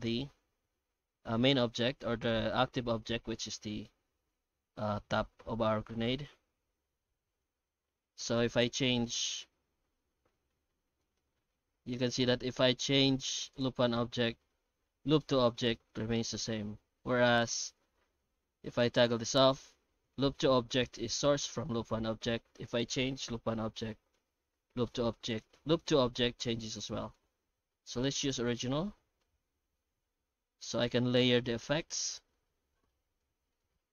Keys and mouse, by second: 6.3 F9.